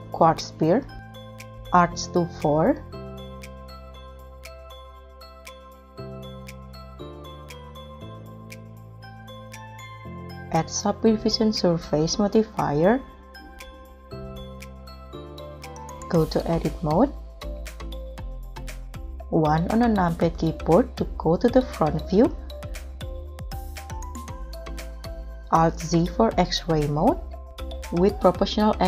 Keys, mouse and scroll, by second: 2.7 4, 3.0 Return, 5.4-5.9 scroll down 4, 6.0 g, 7.5 z, 7.9-8.4 scroll up 4, 8.8 middle click, 9.6 scroll up 1, 19.1 KP_1, 22.5 scroll down 1, 25.7 alt+z.